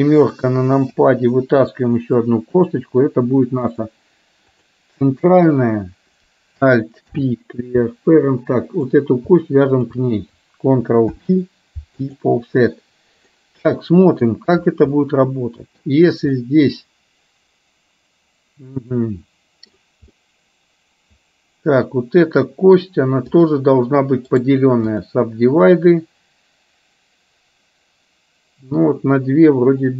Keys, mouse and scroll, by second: 1.0 KP_7, 2.6 e, 4.5 click, 8.1 alt+p, 8.7 click, 9.7 shift+click, 11.1 ctrl+p, 13.3-14.3 middle drag, 15.1 middle click, 16.5-19.7 middle drag, 20.2-22.8 middle drag, 23.3 click, 24.7 right click.